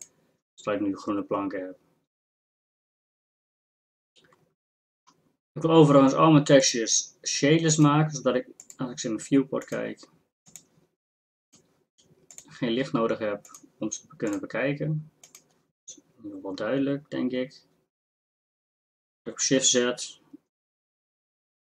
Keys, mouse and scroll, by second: 19.4 shift+z.